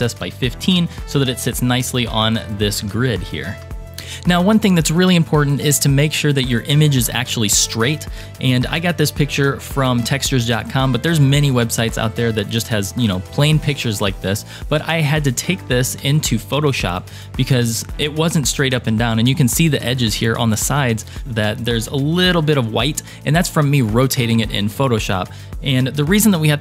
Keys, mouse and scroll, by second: 3.0-3.6 shift+middle drag, 3.8 middle click, 3.8 scroll down 2, 8.8 KP_3, 10.4-11.9 scroll up 1, 15.4 click, 16.8-17.2 scroll up 2, 17.2-17.9 scroll down 4, 17.9 scroll up 1.